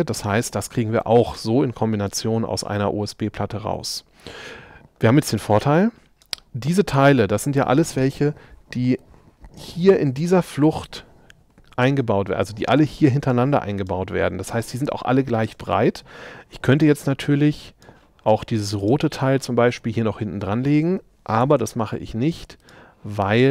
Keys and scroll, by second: 21.5 m.